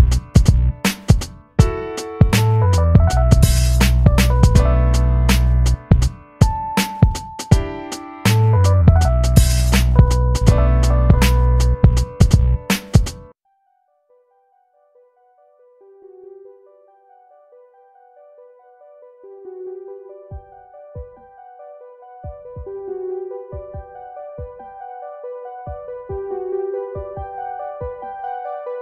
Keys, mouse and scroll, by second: 7.0-8.7 middle drag, 8.7 i, 9.5 click, 10.8 v, 11.2 click, 11.6 space, 11.8 click, 12.1 space, 14.8 click, 16.0-19.2 shift+drag, 19.7-28.8 shift+drag.